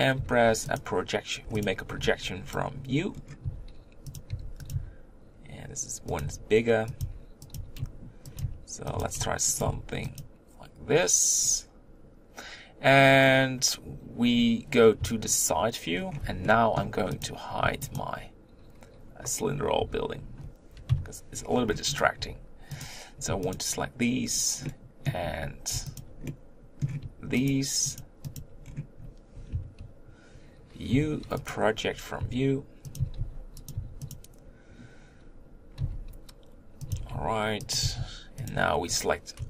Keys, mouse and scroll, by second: 0.8 u, 1.6 click, 1.8 b, 3.4 s, 4.4 g, 4.7 s, 6.2-9.6 typing, 15.0 KP_3, 15.9 scroll down 3, 16.2 Tab, 16.4 middle click, 17.2 click, 18.0 shift+click, 19.8 h, 20.9 KP_3, 21.5-22.0 scroll up 3, 22.0 click, 22.2 Tab, 22.8 click, 23.5 shift+click, 24.6-26.0 middle drag, 26.0 shift+click, 26.3 middle click, 26.9-27.5 scroll up 1, 27.5 shift+click, 28.2 shift+click, 28.6-29.5 scroll down 3, 29.5 KP_3, 31.5 u, 32.2 s, 33.0 s, 33.7 g, 35.8 s, 36.9 g, 37.8 s.